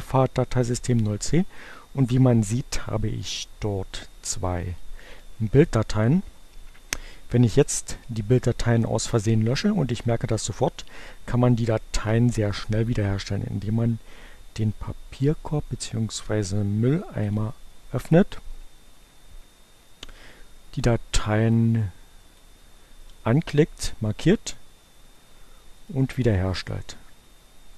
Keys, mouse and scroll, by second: 4.1-5.2 drag, 10.0 Delete, 16.6-17.8 drag, 21.0-22.8 drag, 25.6 right click.